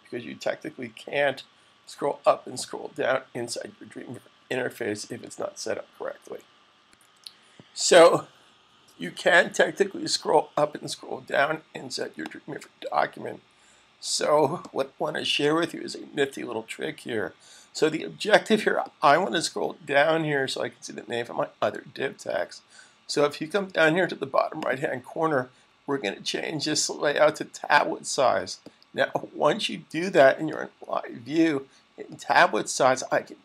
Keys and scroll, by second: 1.4 super+Down, 2.1 super+Down, 2.3 typing.